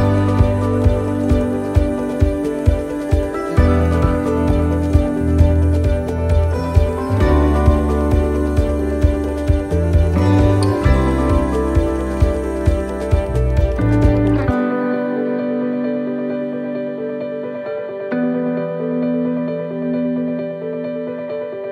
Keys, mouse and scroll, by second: 0.5 click, 2.1 middle click, 3.2 click, 5.5 middle click, 6.3-6.9 scroll up 2, 6.7 middle click, 7.6 right click, 8.1 shift+right click, 8.5 right click, 9.2 shift+right click, 10.0 click, 12.5 right click, 13.3 click, 15.4 middle click, 18.5 middle click, 18.5 right click, 20.6 click, 21.6 right click.